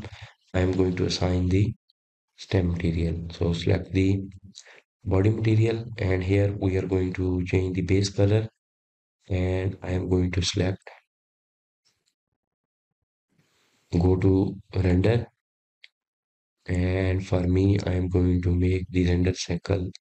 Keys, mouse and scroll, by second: 1.7-4.7 drag, 6.9-8.9 scroll down 6, 8.9 click, 16.6 click, 19.3 click.